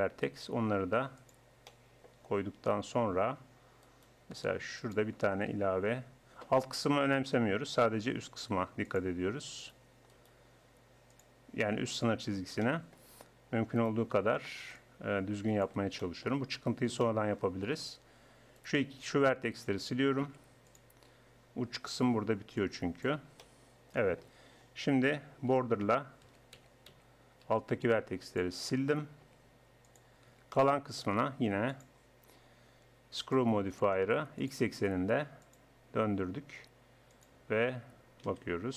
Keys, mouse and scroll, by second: 0.2-1.7 drag, 1.7 right click, 2.1-3.6 drag, 3.9-5.6 right drag, 5.6 click, 8.4 ctrl+r, 10.1-11.1 drag, 13.8-15.5 right drag, 14.8-16.0 drag, 16.0 middle click, 18.6-20.2 right drag, 20.2-22.6 drag, 20.2 x, 23.4 middle click, 23.8 click, 25.4-27.5 typing, 29.2 x, 30.3 Tab, 34.4-38.2 drag, 38.2 KP_1.